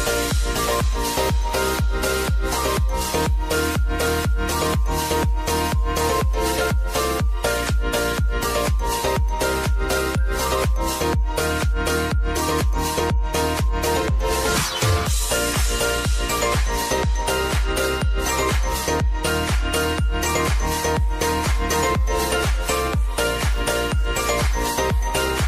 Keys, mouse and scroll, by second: 5.6 v, 6.2-8.3 drag, 8.3 s, 9.1-13.9 drag, 16.2 ctrl+alt+Home, 18.5 click, 19.4 Return, 20.2-23.9 drag, 24.5 ctrl+d.